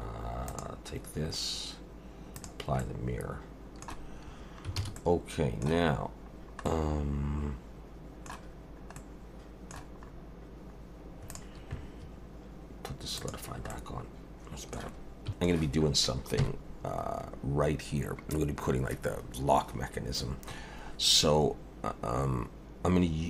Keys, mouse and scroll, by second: 0.5 click, 2.4 click, 2.8 middle click, 4.8 alt+a, 5.0 middle click, 5.9-6.4 scroll up 1, 6.4 scroll down 1, 6.6 middle click, 8.6 scroll down 1, 9.0 middle click, 10.1-11.3 scroll up 1, 11.3 click, 13.2 click, 13.7 middle click, 15.2 middle click, 15.4 scroll down 1, 15.5 click, 16.4 KP_1, 21.2-23.2 scroll up 2.